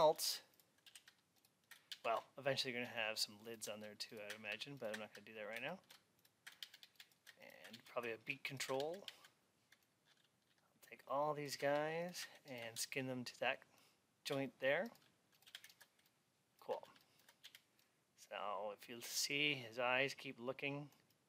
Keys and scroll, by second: 6.4 alt+x, 16.6 alt+x.